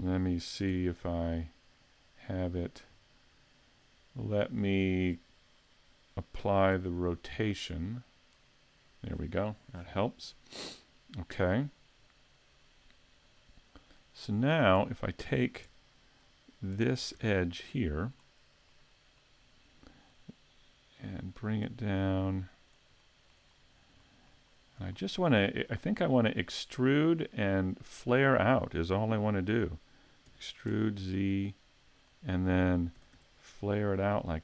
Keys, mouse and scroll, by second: 0.7 n, 2.1 click, 6.7 ctrl+a, 11.7-12.1 scroll up 2, 12.1 scroll down 1, 13.4 click, 15.7 Tab, 16.2 right click, 16.9 ctrl+Tab, 17.5 right click, 18.1-18.7 scroll down 1, 18.7 middle click, 20.1 click, 23.0 shift+middle click, 23.5-24.0 scroll up 2, 24.0 shift+middle click, 24.5-24.9 scroll up 2, 24.9 shift+middle click, 25.7 middle click, 30.3 e, 32.2 click, 33.0 s.